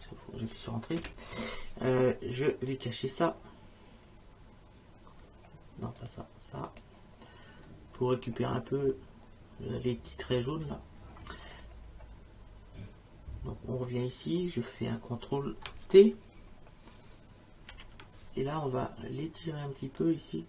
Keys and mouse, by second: 1.0 Return, 2.7 click, 6.0 click, 17.7 ctrl+t, 20.0 click.